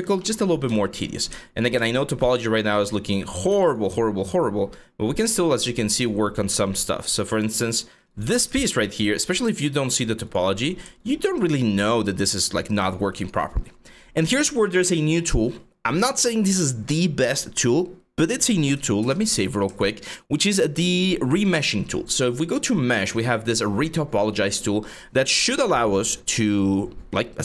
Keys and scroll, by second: 18.6 ctrl+s.